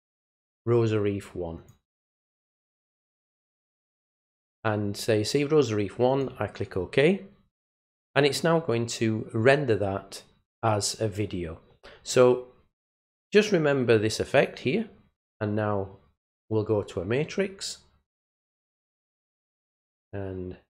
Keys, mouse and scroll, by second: 0.0 click, 1.6 click, 3.0 click, 6.1 click, 16.2 click, 18.4 click.